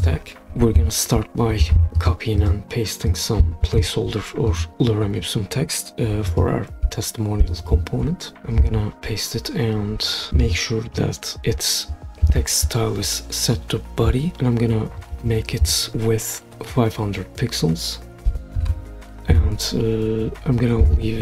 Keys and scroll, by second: 3.6 super+c, 6.9 t, 18.0-19.2 typing, 19.2 Return.